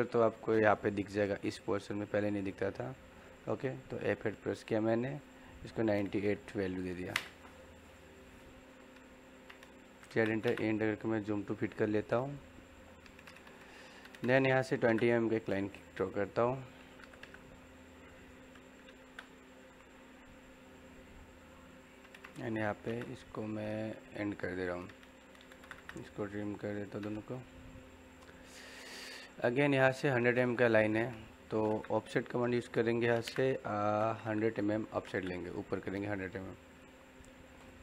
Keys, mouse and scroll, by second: 3.4 F8, 9.8 z, 10.1 space, 10.2 e, 10.4 space, 11.1-14.6 middle drag, 14.6 l, 14.8 space, 15.9 click, 21.8 click, 22.6 l, 22.8 space, 24.0 click, 24.9-25.8 typing, 25.8 click, 31.2-33.2 typing, 36.6 click.